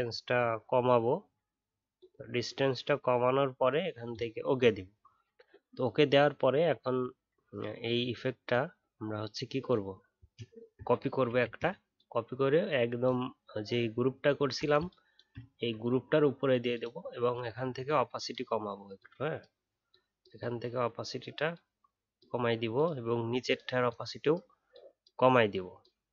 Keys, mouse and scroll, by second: 11.2 ctrl+j, 13.9 alt+scroll down 1, 14.3 alt+scroll up 1.